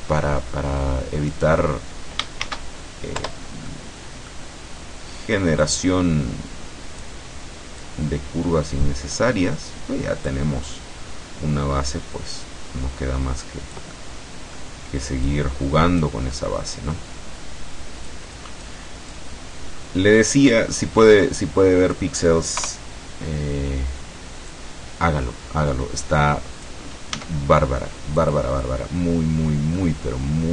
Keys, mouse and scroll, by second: 1.4 right click, 2.5 shift+d, 3.3 Return, 3.7 middle click, 5.7-7.3 drag, 7.9-9.4 drag, 10.3-14.8 drag, 14.0 right click, 15.3 click, 16.4 middle click, 18.1 click, 19.1-20.6 drag, 21.1-22.2 drag, 22.7 KP_0, 24.5-26.9 drag, 27.3 s, 28.3 click, 29.9-30.5 middle drag.